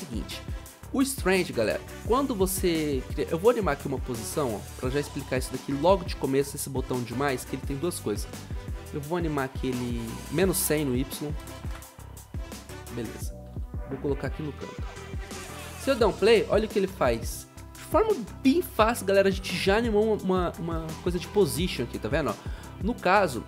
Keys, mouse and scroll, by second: 11.1-12.0 typing, 13.5 v, 15.6 o.